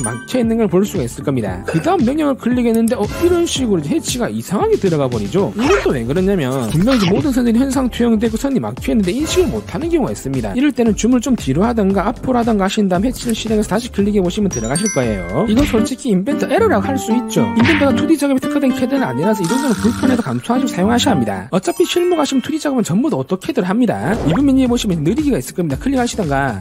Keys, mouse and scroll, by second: 2.9 click, 10.8 scroll down 2, 11.9-12.3 scroll up 2, 13.1 click, 15.6 scroll down 1, 15.9-16.4 scroll up 1, 16.9 click, 18.0 click, 18.7 click.